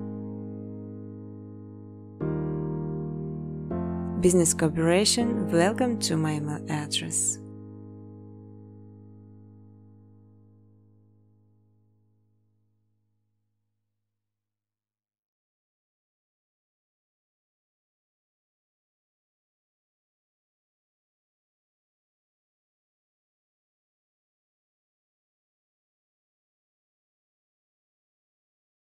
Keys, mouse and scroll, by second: 0.3 space, 2.4 click, 2.6-3.9 typing, 4.8 click, 5.0 click, 6.6 click, 7.9 click, 8.2 3, 8.6 Tab, 8.9-14.8 Tab, 9.7 9, 10.7 click, 11.3 middle click, 11.7 middle click, 11.8 space, 14.3-15.3 typing, 17.3 space, 17.6 space, 18.4 click, 19.2 space, 20.2 space, 20.8 click, 21.6 space, 23.8 space, 24.3 space, 25.4 space, 26.1 space, 27.3-28.8 typing.